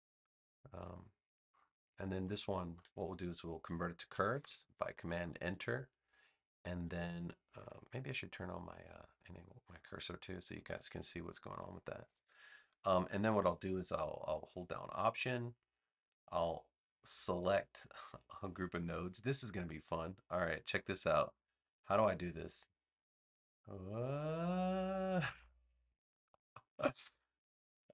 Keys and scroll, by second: 4.3 super+Return.